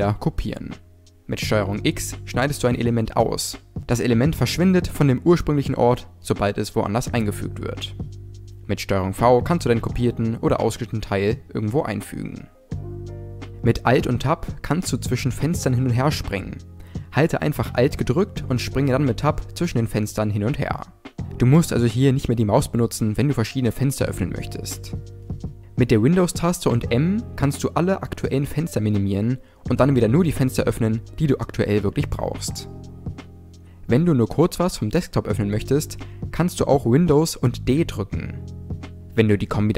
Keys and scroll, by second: 1.3 ctrl+x, 8.4 ctrl+v, 13.8 alt+Tab, 25.5 super+m, 36.5 super+d.